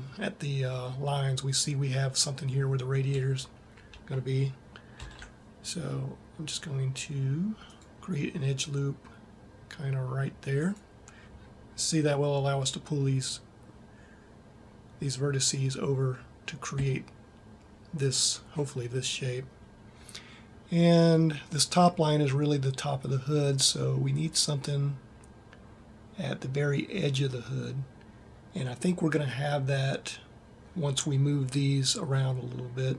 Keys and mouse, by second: 4.8 ctrl+r.